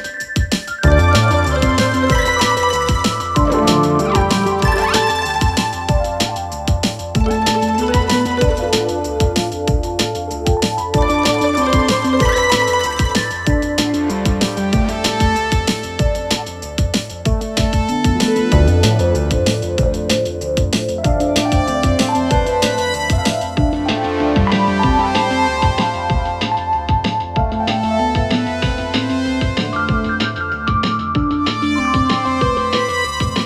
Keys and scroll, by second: 6.3 ctrl+z.